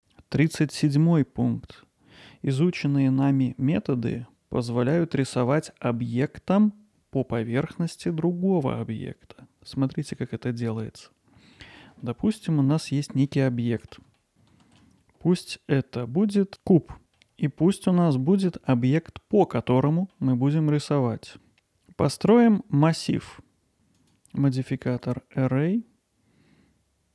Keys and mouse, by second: 10.0-11.6 middle drag, 12.0 middle click, 12.9 middle click, 13.6 alt+middle click, 14.2 ctrl+alt+middle click, 14.3 Tab, 14.6 shift+a, 17.0 alt+middle click, 17.4-17.9 middle drag, 19.8 middle drag, 24.0-25.0 drag.